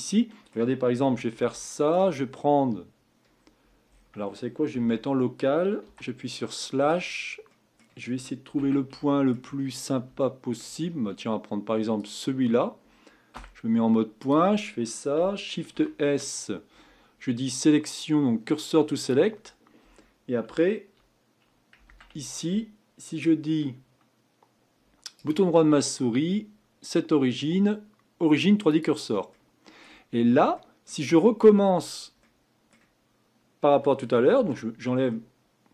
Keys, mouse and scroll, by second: 1.0 Tab, 1.6 shift+middle click, 2.2-3.8 scroll up 9, 3.8-4.8 scroll down 7, 4.8 Tab, 5.8 KP_Divide, 6.4-7.1 middle drag, 7.1-7.5 scroll down 4, 7.5-8.6 middle drag, 8.6 Tab, 9.1 shift+middle click, 9.6-10.2 scroll up 4, 10.2 shift+middle click, 10.7-12.0 scroll up 2, 12.0 click, 13.3 1, 14.2 click, 15.7 shift+s, 21.8 Tab, 25.1-28.3 right drag, 29.3-30.1 middle drag, 30.1-30.5 scroll down 3, 30.5-31.4 middle drag, 31.4-32.2 scroll down 5, 32.2-34.3 middle drag, 34.3 KP_Divide, 35.1-35.7 middle drag.